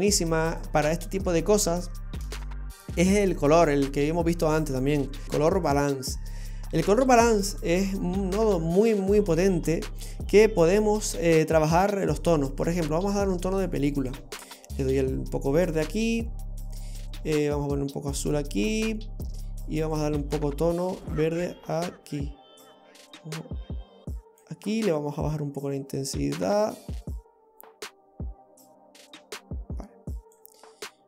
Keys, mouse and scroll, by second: 2.3 shift+a, 9.0-9.5 scroll up 5, 10.1 middle click, 14.0 click, 15.5 click, 17.5 click, 20.0 click, 25.2 click.